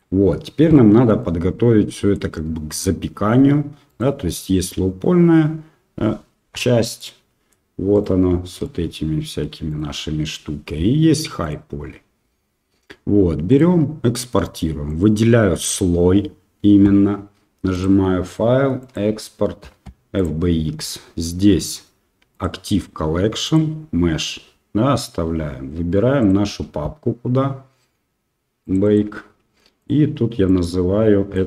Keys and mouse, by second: 0.0-0.7 drag, 0.7-1.2 middle drag, 1.9 middle click, 6.6 KP_Divide, 6.9-7.5 middle drag, 8.6-9.4 middle drag, 12.3 click, 13.5 click, 14.9 click, 17.7-20.4 drag.